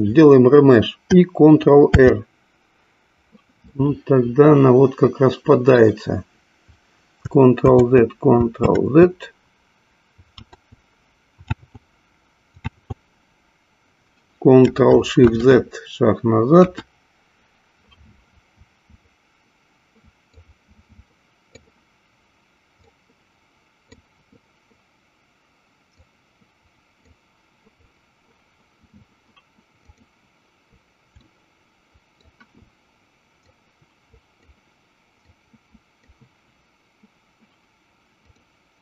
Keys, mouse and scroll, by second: 2.1 ctrl+r, 4.3-6.1 middle drag, 8.2 ctrl+z, 9.2 ctrl+z, 10.7 ctrl+z, 11.8 ctrl+z, 13.1 ctrl+z, 15.3 ctrl+shift+z, 16.9 KP_1, 20.5-22.3 drag, 23.3 click, 26.1-27.6 drag, 30.0 click, 31.4-32.6 shift+middle drag, 33.6 click, 35.2-36.4 drag, 38.2 click.